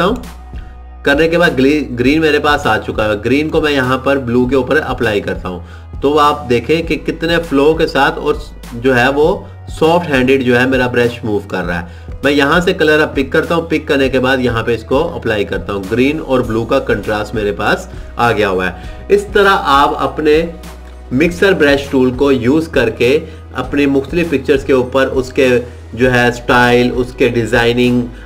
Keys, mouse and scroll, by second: 5.0 click, 15.2 click.